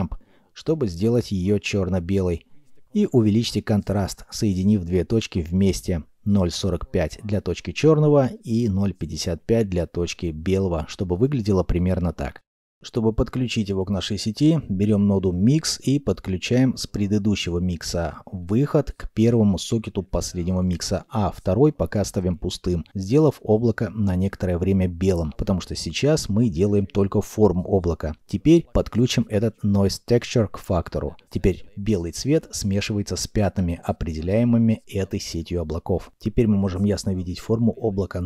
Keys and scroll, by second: 16.0 shift+d, 22.5 g.